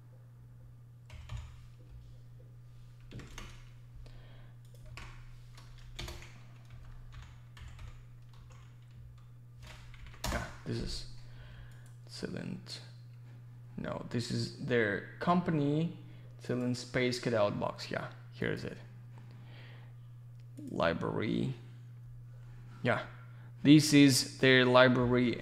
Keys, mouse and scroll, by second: 18.7 click, 20.5 click, 20.6 click.